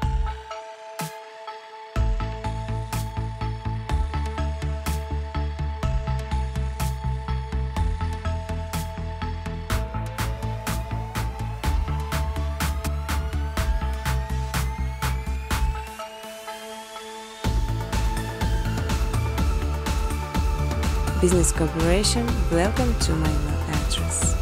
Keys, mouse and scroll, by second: 0.2 space, 0.4 scroll, 0.5 scroll down 4, 0.6 scroll, 0.7 scroll down 3, 0.9 scroll, 1.4 click, 1.7 click, 2.1 ctrl+c, 2.3 ctrl+d, 2.7 click, 4.8 shift+click, 6.0 click, 6.3 space, 7.5 space, 7.9 click, 8.1 right click, 9.6 click, 11.1 click, 14.2 click, 14.7-16.0 typing, 17.2 click, 17.4 click, 19.4 click, 19.4-20.4 typing, 22.0 click, 22.6 space, 23.3 space, 24.1 click.